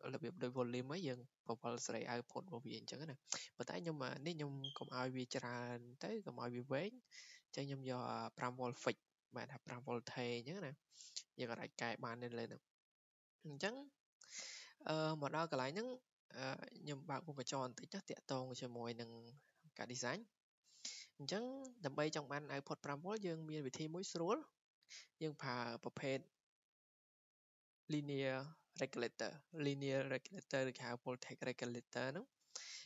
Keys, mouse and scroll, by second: 9.2 click, 11.3 click, 13.2 click, 17.6 click, 18.9 scroll, 19.7 scroll, 20.0-21.2 scroll down 16, 21.0-21.5 scroll up 10, 21.5 scroll down 12, 26.1 scroll down 1, 26.3 scroll, 26.5 scroll down 1.